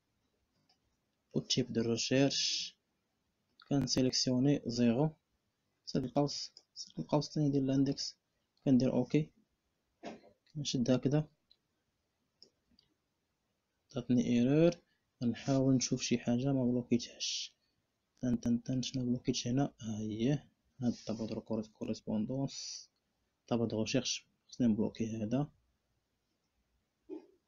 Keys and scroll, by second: 0.3 ., 5.4 [, 7.6 Return, 24.2 F4, 26.0 F4.